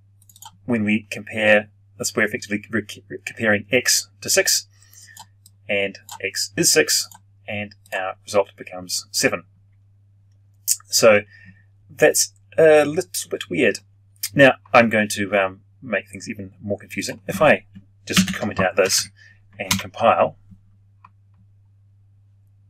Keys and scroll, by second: 18.0 ctrl+/, 19.6 ctrl+F9.